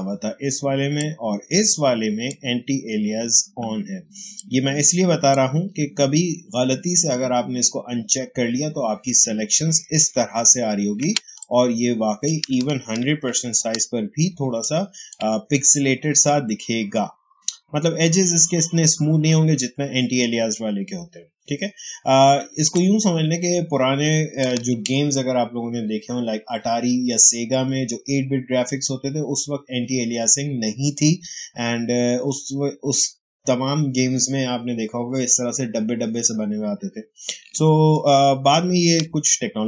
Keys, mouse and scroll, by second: 0.9-7.9 drag, 1.2 h, 4.6 h, 9.6 space, 11.3-13.0 ctrl+drag, 11.6 h, 13.0 ctrl+1, 14.3 space, 14.5 click, 14.8 space, 22.3 ctrl+space, 22.6 ctrl+click, 22.8 ctrl+space, 23.0 h, 38.4 ctrl+1.